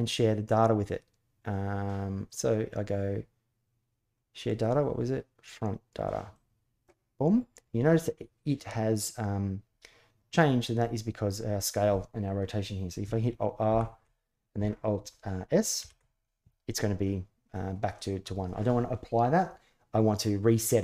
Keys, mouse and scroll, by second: 13.4 alt+r, 15.6 alt+s.